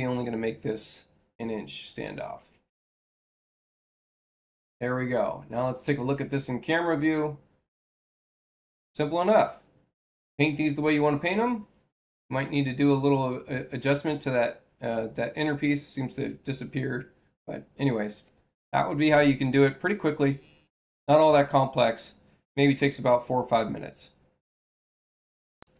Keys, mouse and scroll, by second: 1.9 click, 5.7 click, 25.5 click.